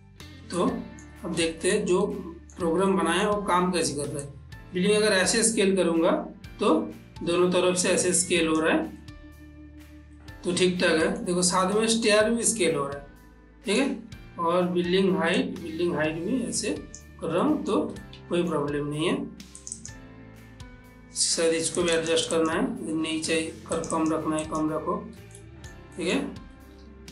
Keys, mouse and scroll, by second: 0.1 click, 1.0 middle click, 1.8-4.6 shift+middle drag, 4.6-9.4 drag, 9.4-12.0 middle drag, 12.0-15.7 ctrl+middle drag, 15.7-17.8 drag, 17.8 ctrl+middle click, 18.4-20.0 shift+middle drag, 20.0 click, 22.2 click, 24.1 click, 25.7 shift+middle click.